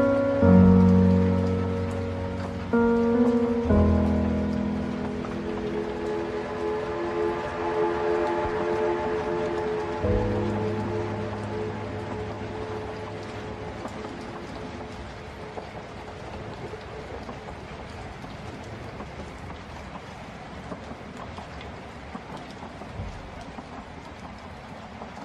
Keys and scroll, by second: 18.8 ctrl+0.